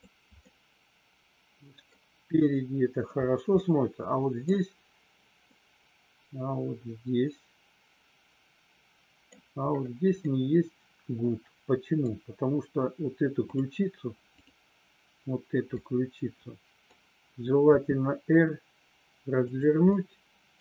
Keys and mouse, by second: 0.5-1.8 middle drag, 3.6-4.3 middle drag, 5.5-9.2 middle drag, 10.2-11.9 middle drag, 14.3 click, 15.7-16.8 middle drag, 17.7 r, 19.9-20.5 middle drag.